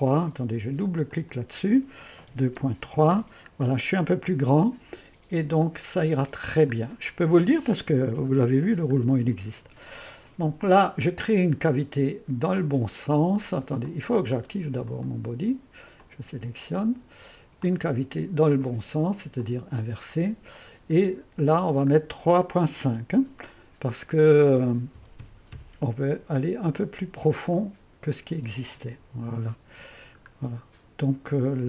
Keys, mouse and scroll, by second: 1.8 click, 2.4 KP_2, 2.9 KP_3, 3.2 Return, 5.7-6.9 drag, 7.0-8.1 scroll up 1, 8.1 1, 12.6 click, 13.9-16.1 drag, 16.3-17.7 drag, 17.8-19.4 drag, 20.4-21.6 drag, 21.6-24.6 scroll down 1, 25.0 3, 25.3 ., 25.6 KP_5, 27.6 click, 29.0 ², 30.5 scroll up 1, 31.3 scroll down 1, 31.3-31.6 typing.